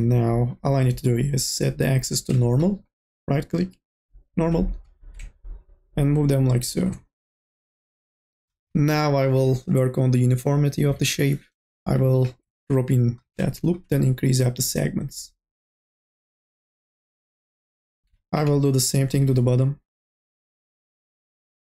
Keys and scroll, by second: 8.4 e, 10.5 k, 10.9 l, 11.5 k, 12.0 l, 16.0-18.2 typing, 19.7 e.